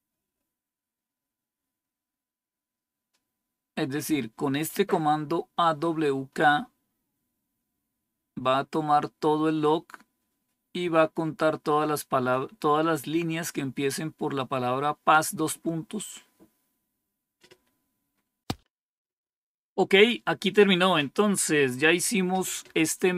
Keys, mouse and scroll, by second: 21.7 Page_Up.